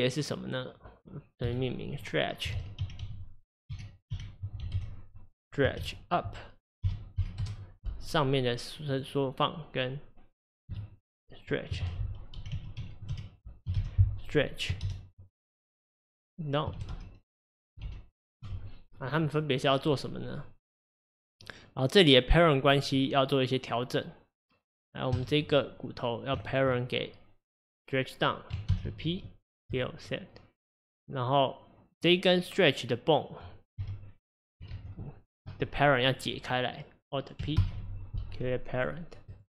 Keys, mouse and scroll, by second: 0.1 click, 1.4 F2, 8.9 click, 10.7 F2, 20.3 click, 25.1 click, 26.5 shift+click, 28.7 ctrl+p, 31.9 click, 33.8 g, 34.8 ctrl+z, 36.0 click, 37.6 alt+p, 39.3 click.